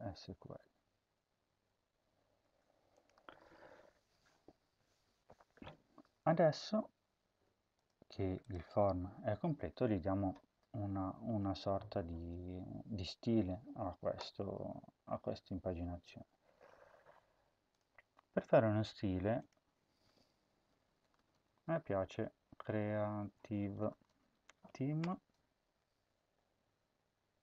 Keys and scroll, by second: 1.0 ctrl+y, 1.3 ctrl+y, 2.3 ctrl+s, 20.4-25.0 typing.